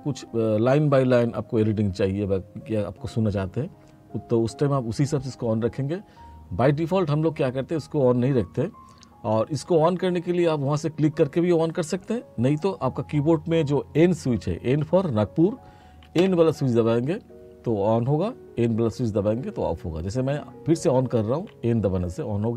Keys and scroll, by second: 16.2 n, 21.4 n.